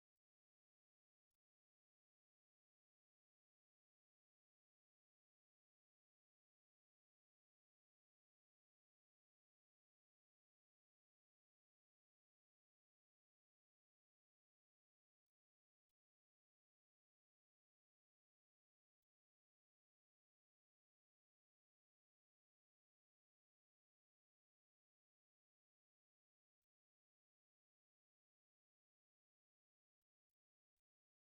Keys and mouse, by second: 0.6 ctrl+z, 1.9 shift+h, 4.6 o, 4.9 shift+h, 5.6 right click, 6.6 Escape, 6.9 middle click, 7.5 middle click, 8.4 alt+right click, 8.7 middle click, 9.8 ctrl+z, 10.2 ctrl+z, 11.8 g, 13.8 alt+right click, 14.6 g, 17.8 middle click, 18.7 right click, 19.9 middle click, 20.6 right click, 21.5 right click, 22.5 alt+g, 23.0 alt+h, 23.4 middle click, 24.6 middle click, 25.1 shift+middle click, 25.4 a, 25.7 middle click, 26.6 right click, 27.6 right click, 28.9 right click, 29.8 right click, 30.6 shift+middle click.